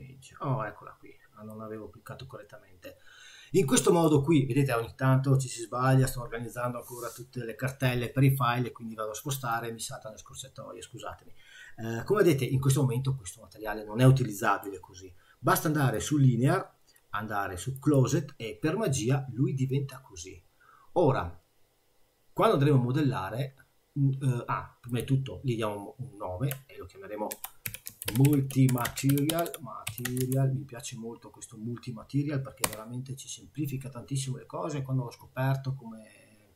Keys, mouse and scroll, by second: 1.5 middle click, 12.5 middle click, 15.9 click, 24.9 click.